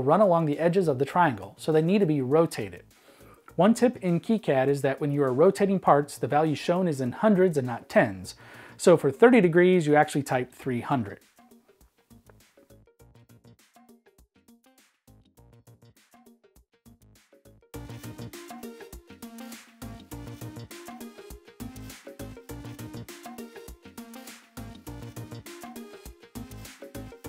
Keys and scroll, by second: 6.7-7.8 typing, 11.3-13.4 typing, 15.4 e, 18.1-22.9 typing, 21.4 shift+super+Right, 24.6 e, 25.8-27.2 typing.